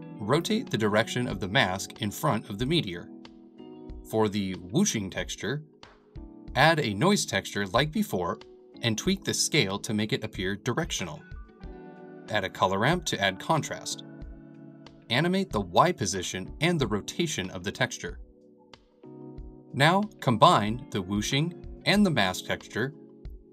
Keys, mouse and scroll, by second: 2.0-3.8 drag, 3.9-7.7 drag, 8.8 click, 9.1-12.2 middle drag, 12.2-15.4 drag, 15.8-17.9 middle drag, 17.9 click, 18.3 middle click, 18.9 click, 19.9-23.5 drag.